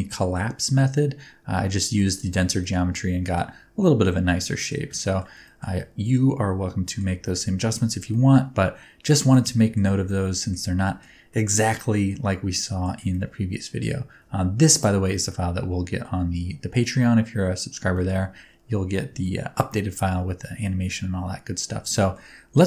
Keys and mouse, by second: 1.9 shift+middle click, 2.6 middle click, 3.5 Tab, 3.8-4.7 middle drag, 4.9 ctrl+middle drag, 5.4 shift+middle drag, 5.7-7.0 middle drag, 7.2 shift+middle drag, 7.7 shift+middle drag, 8.1-9.3 middle drag, 9.5 shift+middle drag, 10.0-10.5 ctrl+middle drag, 10.8 shift+middle click, 11.3-12.8 middle drag, 13.1-13.8 ctrl+middle drag, 15.2-17.7 middle drag, 17.9 shift+middle drag, 19.2-19.5 middle drag, 19.9-21.5 middle drag, 21.9 shift+middle click.